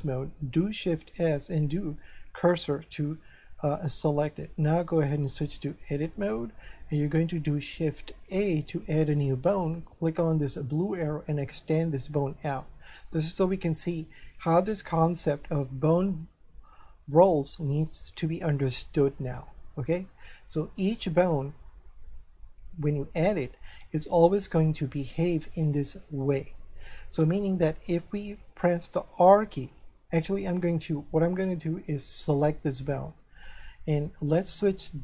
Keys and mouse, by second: 0.8 shift+s, 3.6 click, 4.9 click, 6.3 shift+middle click, 8.4 shift+a, 10.5 click, 13.9 shift+middle click, 32.3 right click.